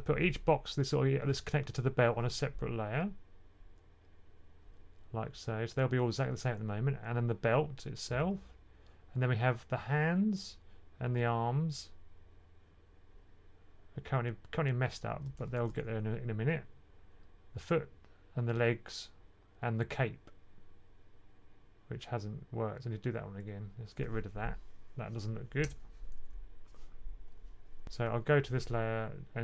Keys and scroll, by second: 15.6 1, 27.8 super+z.